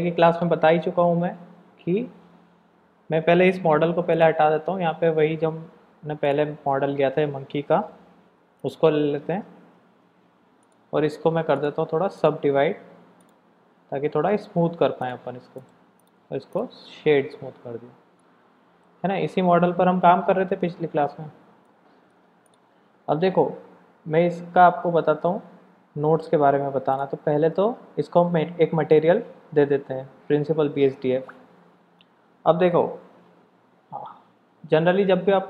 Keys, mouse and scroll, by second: 3.8 x, 4.6 shift+a, 7.5 r, 9.7 g, 11.5 click, 12.3 click, 15.0 click, 15.5 right click, 16.5-17.6 drag, 18.2 shift+middle click, 21.6 middle click, 22.4 click, 29.0 click.